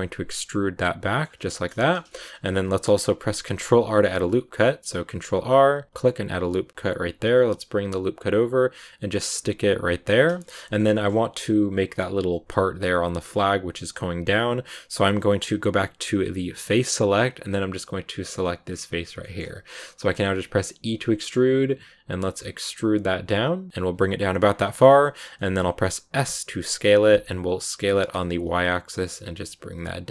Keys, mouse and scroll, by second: 0.3 middle click, 1.2 scroll down 3, 1.4 shift+middle click, 1.6-2.2 scroll up 4, 1.7 middle click, 2.0 shift+middle click, 3.5 ctrl+r, 10.3 shift+middle click, 11.0 scroll up 1, 16.6 click, 17.3-18.5 scroll up 1, 18.5 right click, 19.1 shift+middle click, 19.8 scroll up 1, 19.9-24.4 middle drag, 24.4 scroll down 4, 24.5 middle click, 25.1 scroll up 1, 25.3-26.9 middle drag.